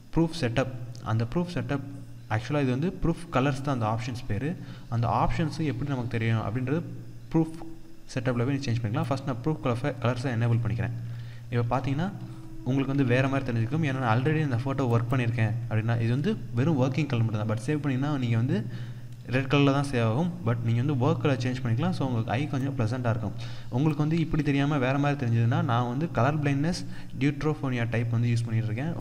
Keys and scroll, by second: 10.6 ctrl+-, 11.1 ctrl+0, 12.5 ctrl+d, 13.5 ctrl+=.